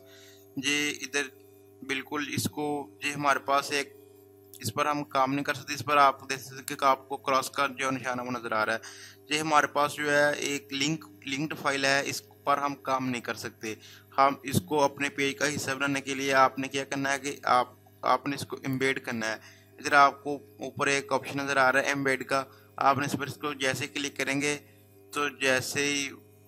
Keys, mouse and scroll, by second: 4.4-9.6 drag.